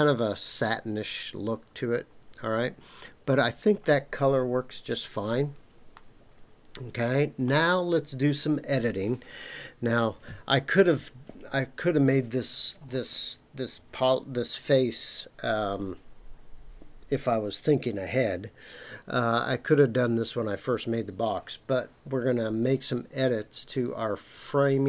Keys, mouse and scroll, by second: 5.9-7.5 middle drag, 7.6-10.3 scroll down 1.